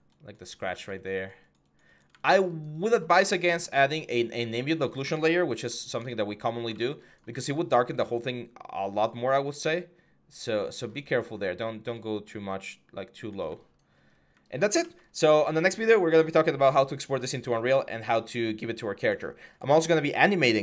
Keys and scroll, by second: 0.4 x, 4.0 1, 13.9 1.